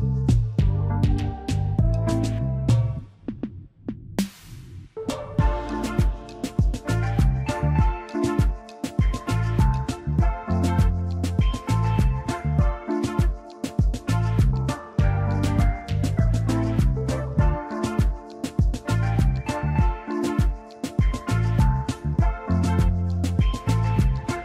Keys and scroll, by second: 2.9 z, 4.1 v, 7.0 z, 7.5 space, 10.6 v, 11.0 space, 19.4 space.